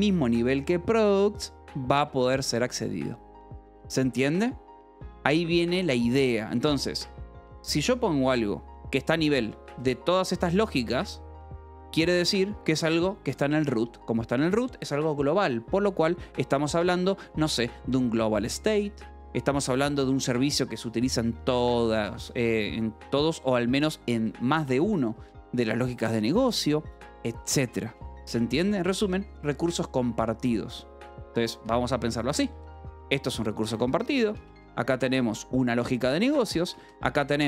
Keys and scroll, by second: 0.0-0.4 typing, 1.9 Escape, 3.6 k, 8.3 shift+v, 9.2 Escape, 9.5-12.6 typing, 12.2 Escape, 14.4 j, 21.7-23.6 typing, 23.4 Escape, 25.4-28.5 typing, 26.1 Escape, 30.6-36.8 typing, 36.2 Escape.